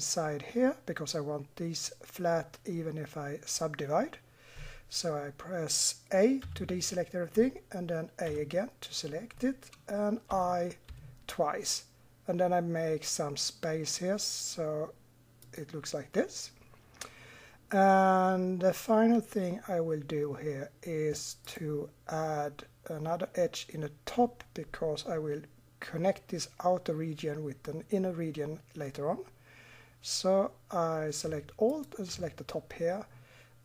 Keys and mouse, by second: 5.3-6.5 middle drag, 6.5 a, 8.3 a, 10.3 i, 21.5-24.5 drag, 31.7-33.6 drag.